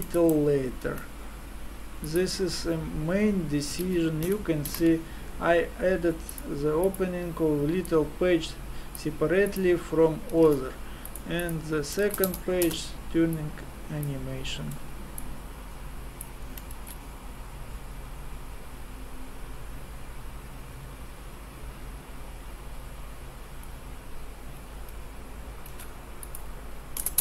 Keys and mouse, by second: 0.9 shift+a, 8.7-15.1 drag, 12.2 KP_0, 15.3 click, 16.8 alt+a, 25.7 alt+a, 26.2-27.2 drag.